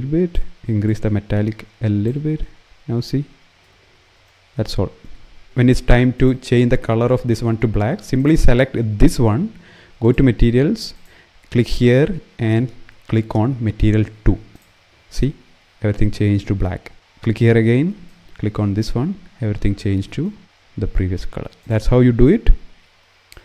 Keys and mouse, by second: 0.5-1.8 drag, 5.8 click, 9.8 click, 10.6 click, 21.3 click.